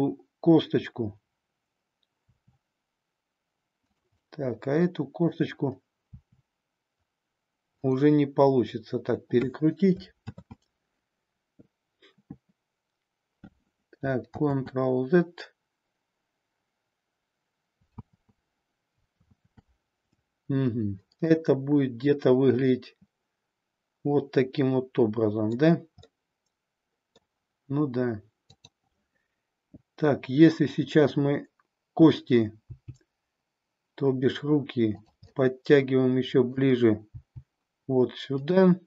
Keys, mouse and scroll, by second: 2.2 r, 3.9 click, 4.1-5.4 middle drag, 6.1 r, 7.8 click, 10.2 ctrl+z, 14.3 ctrl+z, 18.0 ctrl+z, 19.2 ctrl+z, 21.2-25.6 middle drag, 26.0-27.2 middle drag, 28.3-30.6 drag, 32.6 g, 35.0 click, 35.4-36.6 middle drag, 37.1 g, 38.5 click.